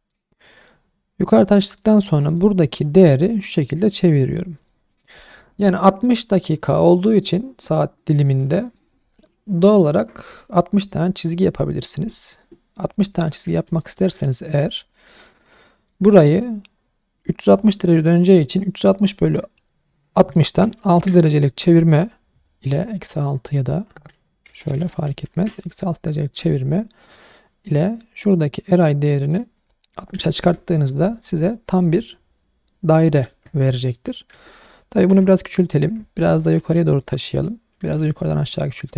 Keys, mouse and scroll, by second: 1.3 Tab, 2.3 click, 3.0 r, 4.6 click, 13.5 scroll down 1, 13.8 shift+middle click, 14.6 n, 15.3 click, 15.9 click, 19.2-20.9 drag, 23.2-25.3 drag, 26.4 click, 27.0 click, 28.2 click, 29.2-30.4 drag, 31.5-32.1 scroll down 2, 33.0-33.7 scroll up 3, 33.8 shift+middle drag, 34.3 Tab, 35.1 s, 35.6 click, 36.1 scroll down 2, 36.3 shift+middle click, 37.0 click, 37.8 s, 38.2 y.